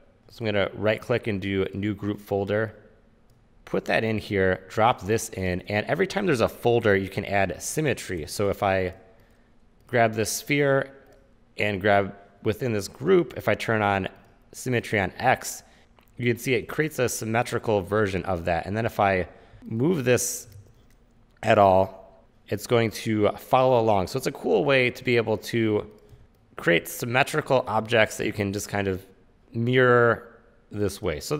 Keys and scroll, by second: 19.6 w, 20.7 super+z, 26.2 r, 28.0 e, 28.4 w.